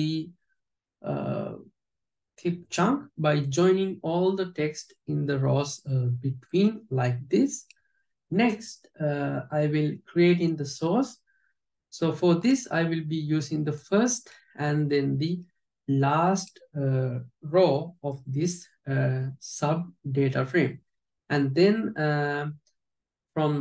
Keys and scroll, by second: 14.4 alt+j.